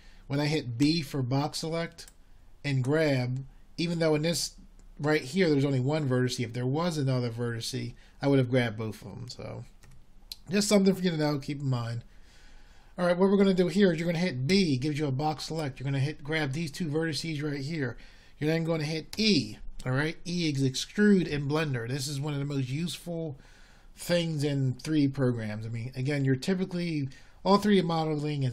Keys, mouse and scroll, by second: 4.1 b, 13.2 a, 17.9 b, 22.7 e.